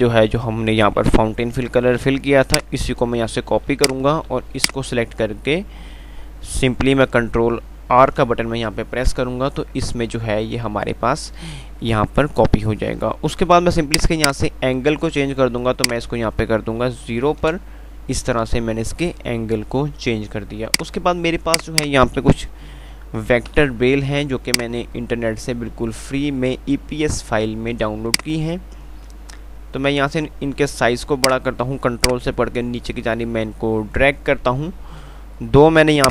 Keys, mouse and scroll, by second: 2.5 click, 8.4 ctrl+r, 14.2 click, 21.0 click, 23.7 Page_Up, 25.8 typing, 32.3 ctrl+right click.